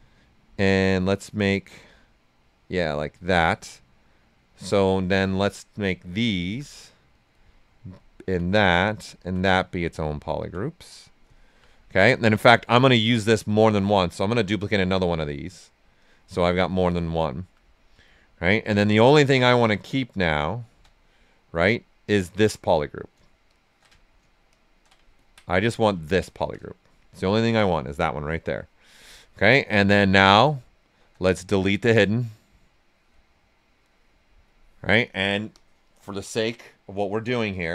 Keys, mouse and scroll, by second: 0.5-3.1 drag, 3.4-5.3 right drag, 5.3-7.3 alt+drag, 7.3 right click, 8.2 alt+click, 8.7 right click, 9.1 alt+click, 9.5 right click, 10.4 alt+click, 10.9 right click, 11.3 alt+right click, 13.2 right click, 14.4 click, 16.5 right click, 18.1 right click, 19.0 right click, 19.8 ctrl+shift+click, 20.8 ctrl+shift+right click, 21.2 right click, 23.4 ctrl+shift+click, 24.5 ctrl+shift+click, 25.6 alt+right click, 26.0 ctrl+right click, 26.9 shift+f, 27.6-29.0 right drag, 29.0-30.8 drag, 31.3-33.3 drag, 33.3 click.